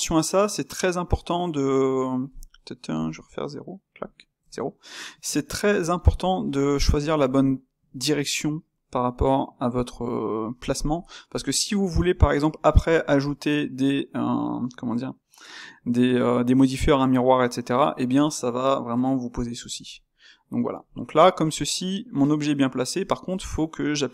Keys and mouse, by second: 3.6-4.3 middle drag, 4.3 KP_0, 5.2-11.2 middle drag, 11.2 KP_7, 12.1-19.7 ctrl+middle drag, 19.7 KP_0, 20.5-24.1 middle drag.